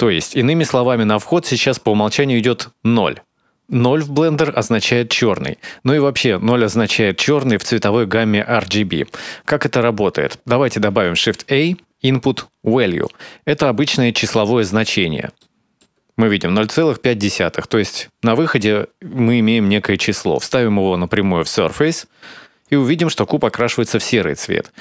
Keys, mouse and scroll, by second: 10.8 shift+a, 14.4-15.2 scroll up 2, 15.2 middle click, 20.1 click, 22.3-23.0 scroll up 2, 23.2 shift+middle click, 24.6 click.